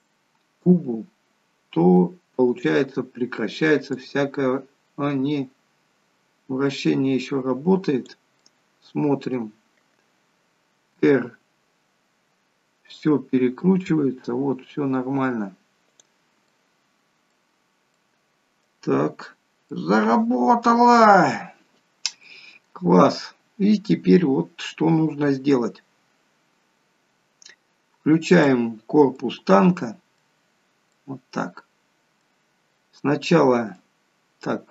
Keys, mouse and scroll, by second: 2.4 click, 3.9 click, 8.4 middle click, 9.6 scroll down 2, 11.0 r, 16.4 middle click, 18.9 scroll up 2, 19.7 middle click, 19.7 scroll up 2, 21.7 scroll down 3, 22.3 middle click, 24.2 scroll down 2, 27.3-27.7 scroll down 1, 28.3 click, 29.2 middle click, 32.5-33.0 scroll up 2, 33.0 middle click.